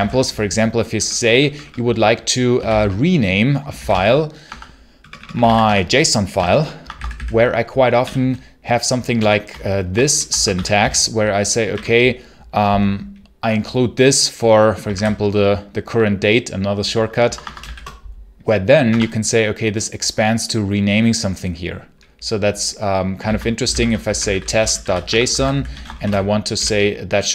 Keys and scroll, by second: 0.0-0.8 typing, 2.2-6.8 typing, 4.3 Tab, 4.8 Return, 6.2 Tab, 6.7 Escape, 7.9 i, 9.0-11.6 typing, 14.8 ctrl+t, 17.1 Escape, 17.5 shift+a, 18.7 Tab, 23.1 ctrl+c, 23.2-27.3 typing.